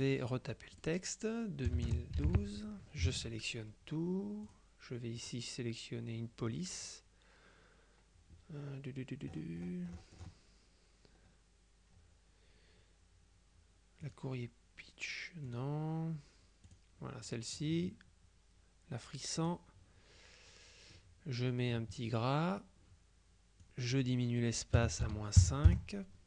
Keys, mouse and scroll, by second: 0.0 click, 0.8 click, 1.8 KP_2, 2.0 KP_0, 2.3 KP_1, 3.2 ctrl+a, 4.6 click, 5.3 click, 9.4-10.2 scroll up 2, 10.2-10.8 scroll down 2, 14.1 click, 15.6 click, 16.8 click, 19.5 click, 23.7 click, 24.9 KP_Subtract, 25.1 KP_5, 25.8 KP_Enter.